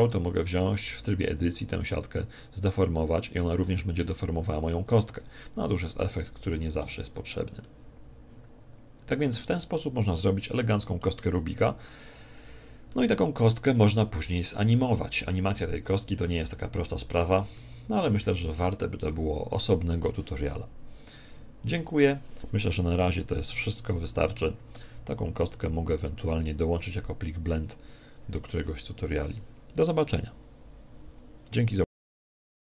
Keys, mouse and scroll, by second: 0.0-3.5 right drag, 0.5 Tab, 2.7 click, 6.8 Tab, 7.7-9.3 middle drag, 10.0 click, 10.5-12.5 middle drag, 12.5 click, 12.9-16.2 middle drag, 17.6-19.3 middle drag, 19.3 middle click.